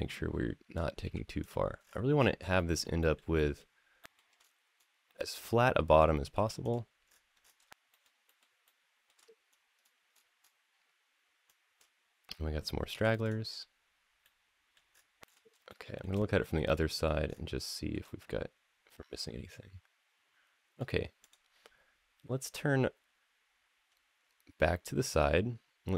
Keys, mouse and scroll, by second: 0.8 x, 1.6-2.1 scroll down 4, 2.4 shift+middle click, 2.8 shift+middle click, 3.1 shift+middle drag, 3.8 shift+middle click, 4.2-5.0 scroll up 2, 5.0 click, 6.1 x, 6.9-7.4 scroll down 3, 7.7 shift+middle click, 8.1 shift+middle click, 8.4 shift+middle click, 9.3-11.3 scroll up 5, 11.3 click, 11.3 scroll up 1, 12.7 x, 14.0 middle click, 14.7-15.4 scroll down 2, 15.0 middle click, 15.5 shift+middle click, 16.2 middle click, 17.1-17.4 scroll down 2, 17.5 shift+middle click, 17.8-20.6 middle drag, 21.0 click.